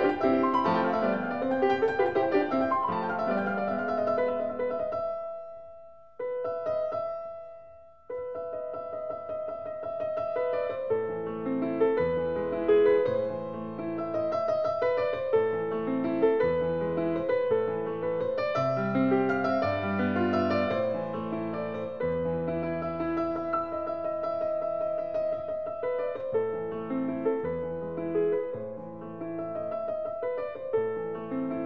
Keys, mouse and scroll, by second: 1.6 click, 2.5 click, 3.3 t, 4.7 click, 5.6 click, 6.8 t, 10.4 click, 11.2 click, 12.2 t, 14.7 click, 15.7 click, 16.6 t, 21.9 t, 24.4 scroll, 25.1 s, 26.1 click, 27.4 click, 30.0 click, 31.0 click.